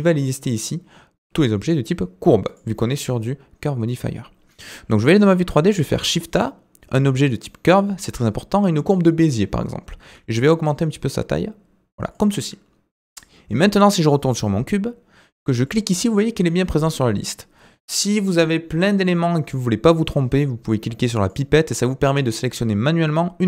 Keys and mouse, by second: 4.7 middle click, 5.6 shift+a, 10.0 s, 15.6-19.4 drag.